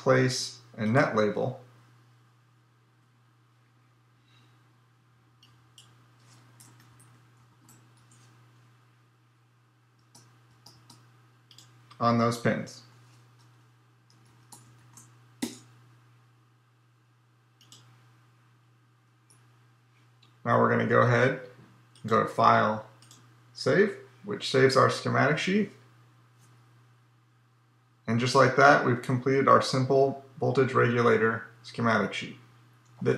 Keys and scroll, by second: 2.8 Tab, 12.6 Tab.